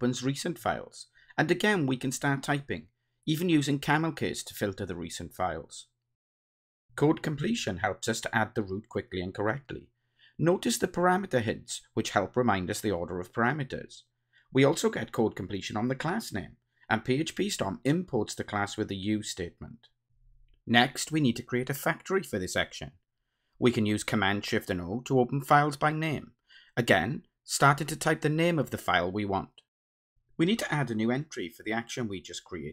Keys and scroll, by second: 7.7 Return, 17.7 Return, 24.1 ctrl+shift+super+o, 31.1 Return.